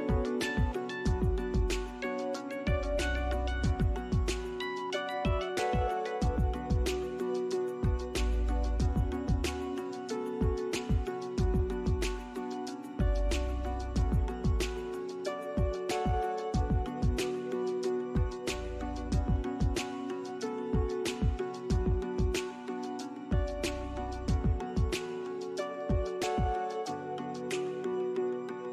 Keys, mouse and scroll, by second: 0.0 double click, 0.4 right click, 3.0 scroll up 1, 3.3 alt+middle click, 3.8 alt+click, 9.2 alt+middle click, 9.5 alt+click, 11.6 alt+click, 13.8 alt+middle click, 20.2 shift+click, 22.7 alt+click, 23.2 middle click, 24.9 alt+click, 27.7 alt+middle click, 28.0 alt+click, 28.6 alt+middle click.